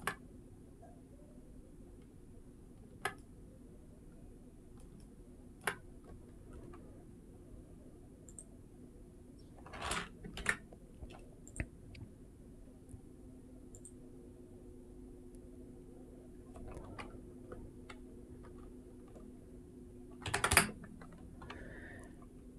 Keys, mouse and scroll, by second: 3.0-4.6 middle drag, 4.8-5.4 shift+middle drag, 8.1 click, 10.2 ctrl+s, 11.3 click, 13.5-21.5 drag.